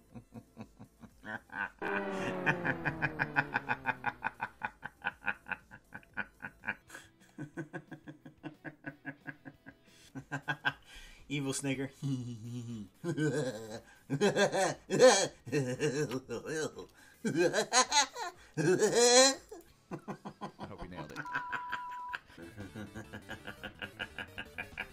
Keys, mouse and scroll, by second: 6.9-10.1 drag.